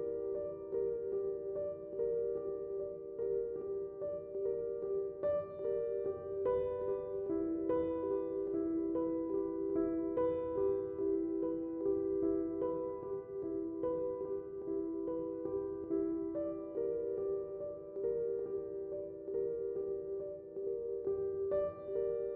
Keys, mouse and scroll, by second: 0.0 d, 2.8 typing, 4.4 click, 9.9 click, 12.7 click, 13.2 space, 13.4 click, 13.7 space, 14.4 click.